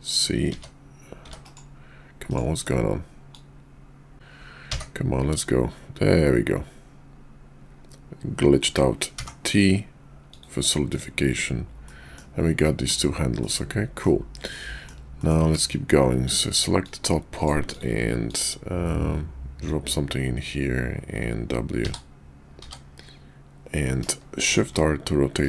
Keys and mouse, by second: 3.3-10.4 drag, 11.9-12.2 middle drag, 12.6 middle drag, 13.4-14.0 middle drag, 14.5-14.9 middle drag, 15.2 shift+middle click, 16.1 click, 16.8-17.5 drag, 17.7 click, 18.3-25.4 drag.